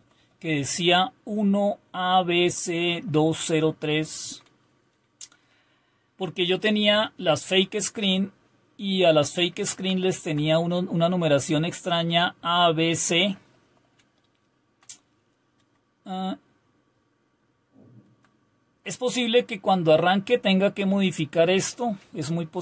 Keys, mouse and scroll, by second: 0.0 Right, 0.5 Right, 2.2 Right, 2.4-3.6 Right, 4.0 Right, 4.2 Right, 9.1 Left, 9.5 Left, 13.6 Right, 13.9 Left, 14.6 Left, 15.6 Right, 16.9-17.9 Down, 20.3-21.5 Up, 22.0 Down.